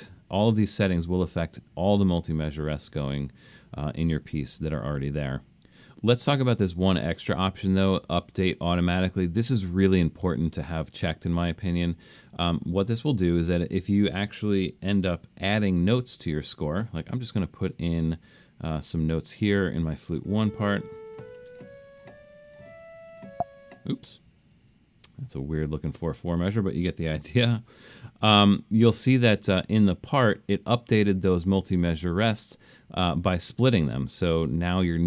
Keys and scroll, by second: 15.3 alt+super+/, 20.8-23.4 typing, 26.2 Escape, 27.7 alt+super+..